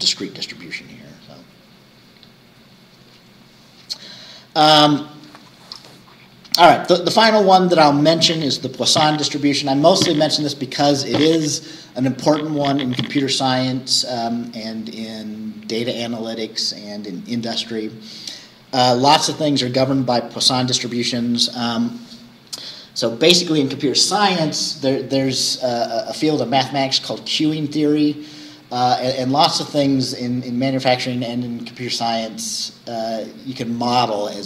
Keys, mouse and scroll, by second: 0.6 scroll down 2, 6.6-6.9 scroll down 2, 6.9-8.3 scroll up 2, 8.3-12.6 scroll up 1, 12.6-16.9 scroll up 1, 16.9-21.1 scroll up 1, 21.1-25.4 scroll up 1, 25.4-29.7 scroll up 1, 29.7-34.4 scroll up 1.